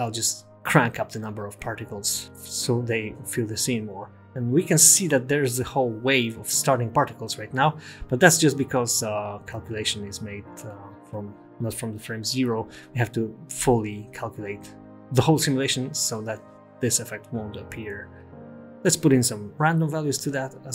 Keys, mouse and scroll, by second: 0.4 click, 4.3 space, 5.7 space, 8.8 space, 11.1 space, 12.0 space, 13.8 space, 14.8-15.6 scroll down 3, 15.6 click, 16.3 click, 16.7 click, 17.3 scroll down 1, 18.9 click.